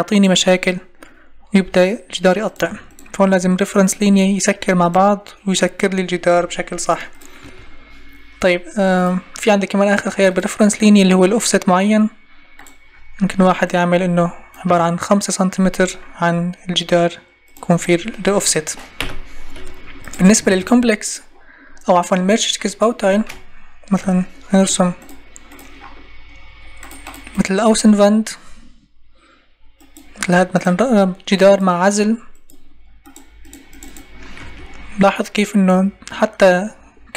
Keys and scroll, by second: 6.3 Escape, 19.0 Delete, 20.4 ctrl+e, 23.9 Delete, 34.4 Escape.